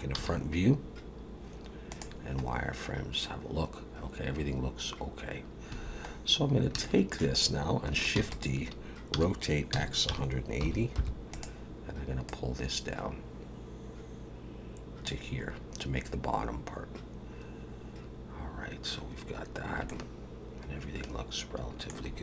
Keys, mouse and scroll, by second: 0.2 z, 2.4-3.3 scroll up 3, 5.7 a, 6.1 scroll down 3, 6.8 shift+middle click, 8.2 shift+d, 9.2 r, 12.3 click, 15.5-16.5 scroll up 3, 16.5-16.9 scroll up 1, 19.4 scroll down 1, 19.9 shift+middle click.